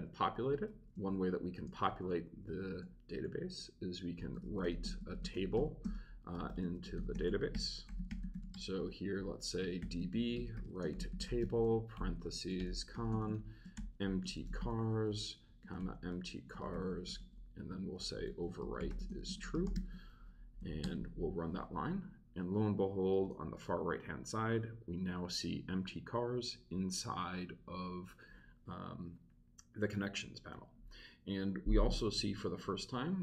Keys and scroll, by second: 1.4 shift+3, 1.9 shift+space, 3.9-20.2 typing, 20.6 shift+super+Right, 20.8 super+Return.